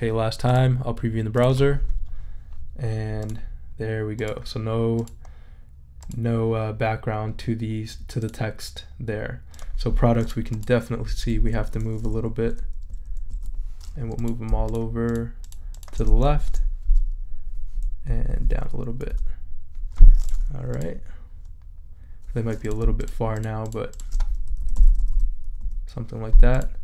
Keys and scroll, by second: 11.1 Down, 11.4 Left, 16.4 shift+Left, 18.1 Down, 19.1 Up, 24.5 shift+Right.